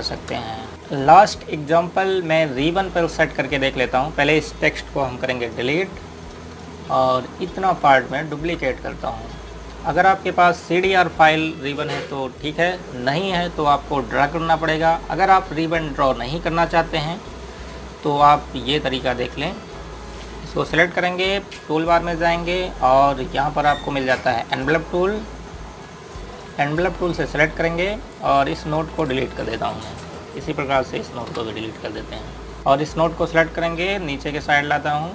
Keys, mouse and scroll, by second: 0.0 typing, 0.4 click, 3.0-3.8 scroll up 1, 3.8 click, 5.9 Delete, 6.3 click, 7.9 scroll down 1, 8.3 click, 8.9 ctrl+right click, 11.7 scroll up 1, 15.6-17.7 scroll down 1, 18.0-18.4 scroll up 1, 19.1 click, 19.9 right click, 25.3 click.